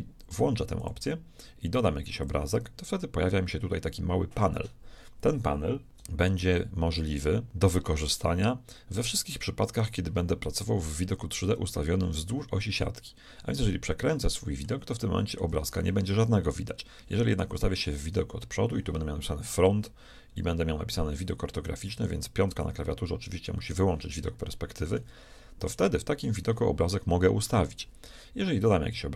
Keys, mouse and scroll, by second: 0.8-4.2 drag, 5.9-7.5 middle drag, 7.5 click, 13.6-16.5 middle drag, 17.9 KP_1, 22.5 KP_5, 23.0 KP_5, 26.1-28.4 middle drag.